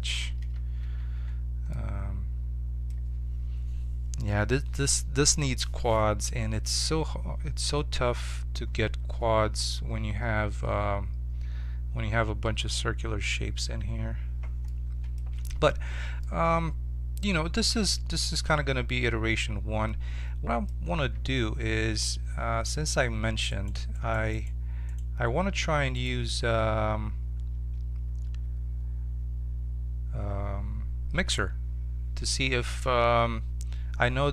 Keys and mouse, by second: 0.5 ctrl+z, 0.8 ctrl+z, 1.8 middle click, 14.6 middle click, 15.3 Tab, 20.9 z, 23.5-34.3 right drag.